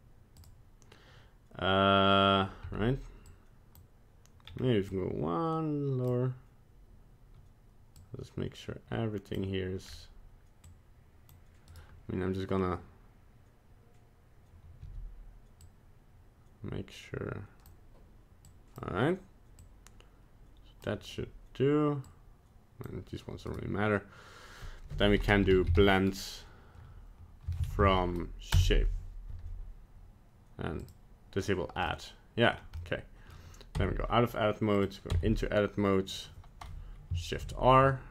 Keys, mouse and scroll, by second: 2.6 c, 14.8 c, 24.9 F3, 30.8 click, 31.9 middle click, 32.5 scroll down 2, 32.8 middle click, 33.8 Tab, 34.7 click, 35.1 Tab, 37.4 shift+r.